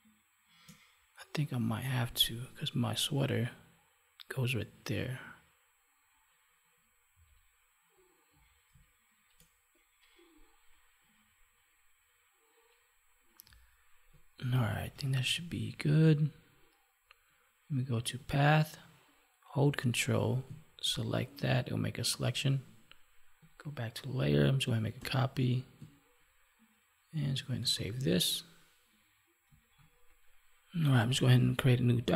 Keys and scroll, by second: 8.7 space, 14.4 ctrl+-, 24.9 ctrl+j, 27.5 ctrl+s.